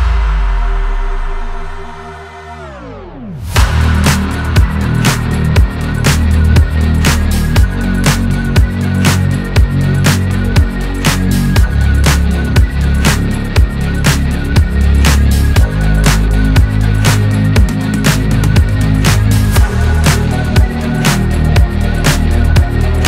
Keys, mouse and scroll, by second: 6.0 alt+g, 6.2 alt+r, 6.7 click, 7.8 KP_0, 9.3 r, 11.0 click, 11.7 click, 13.5 Home, 14.4 t, 15.6-16.0 scroll up 3, 16.0 shift+middle click, 16.6 click, 17.9 click, 19.3 click, 21.9 click, 22.3 click.